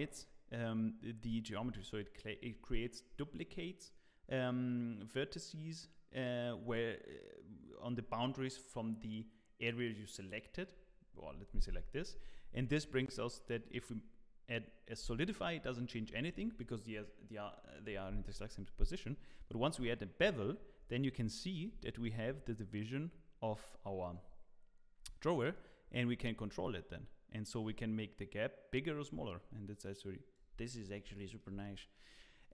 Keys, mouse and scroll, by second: 12.1 Tab, 13.5 click, 19.2 click, 20.8-21.5 scroll up 2, 21.3 shift+middle click, 25.5 click, 30.7 scroll down 1, 31.1 shift+middle click.